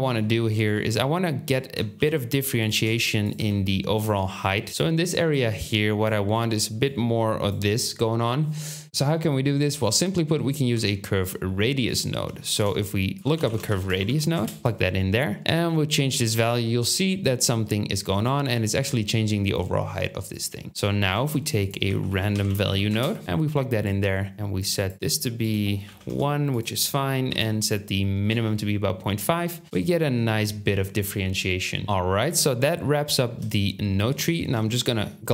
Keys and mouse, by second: 2.0 g, 2.6 ctrl+click, 3.3-4.7 drag, 3.3 g, 4.7 ctrl+z, 8.8 Tab, 8.8 ctrl+z, 10.7 Tab, 12.5 shift+a, 13.7-14.8 drag, 15.4 click, 21.1 shift+a, 31.8 shift+click, 31.8 g, 32.6 shift+middle click, 34.1 shift+middle click.